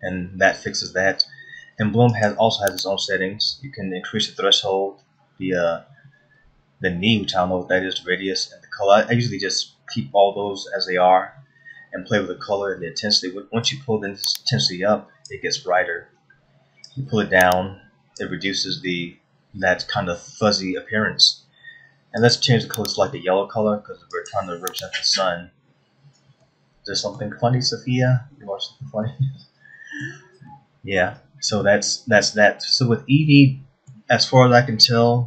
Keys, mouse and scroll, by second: 2.8 click, 14.3 click, 17.5 click, 22.8 click, 27.0 middle click, 29.7 middle click, 31.6 middle click, 32.3 middle click, 33.8 middle click.